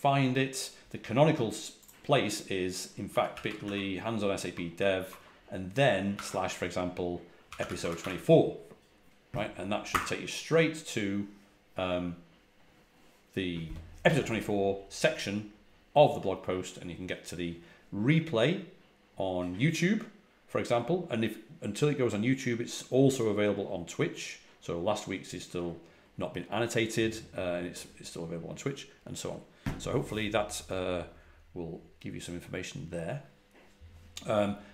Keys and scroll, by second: 2.7-4.0 typing, 6.0 alt+3, 7.1-8.4 typing, 9.8 typing.